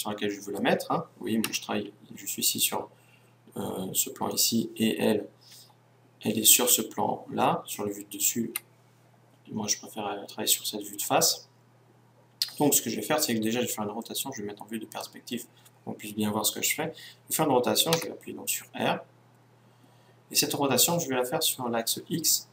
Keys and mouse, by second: 1.4 KP_1, 5.7 KP_7, 8.5 KP_1, 13.9-18.2 middle drag, 18.2 r.